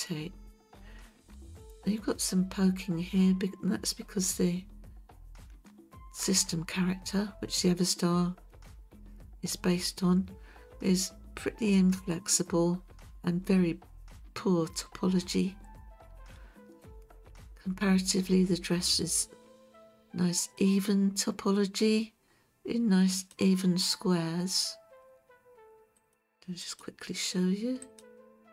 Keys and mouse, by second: 23.1 click, 26.0-26.8 drag, 27.8 click.